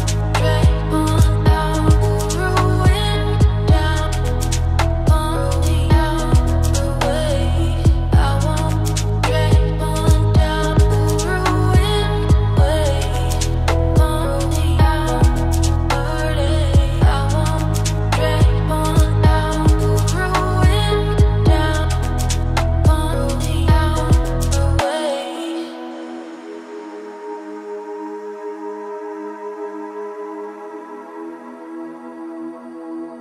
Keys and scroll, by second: 23.6 ctrl+z, 28.6 ctrl+a.